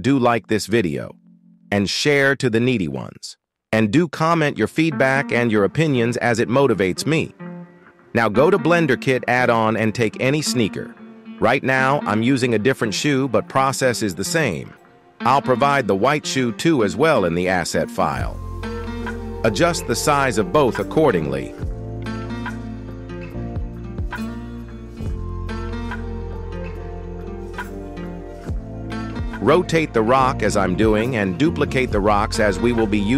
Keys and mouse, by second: 0.7-1.1 middle drag, 1.3 shift+middle click, 19.1 s, 19.2 s, 22.9 s, 23.0 s, 23.3 g, 25.6 z, 25.6 z, 26.1-27.0 middle drag, 27.7-29.1 middle drag, 29.8 KP_1, 31.7 KP_7.